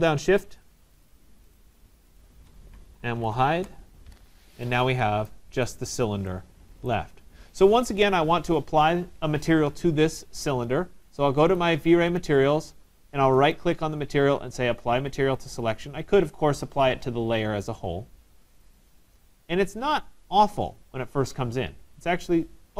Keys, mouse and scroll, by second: 0.0 shift+click, 0.7 shift+click, 1.2 shift+click, 1.6 shift+click, 2.2 shift+click, 3.4 typing, 11.6 click, 13.6 right click, 15.6 click, 18.9 click, 19.5 middle click, 19.6 middle click.